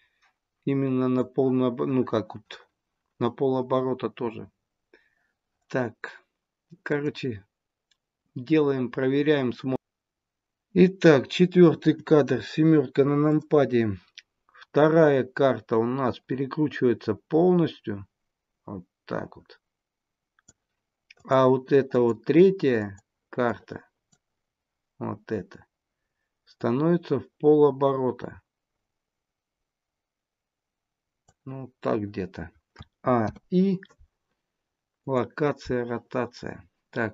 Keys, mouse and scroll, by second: 6.8 click, 11.6 KP_7, 13.2 click, 15.3 click, 21.2 click, 21.9 click, 22.7 click, 23.4 click, 26.7 click, 32.7 a, 33.2 i.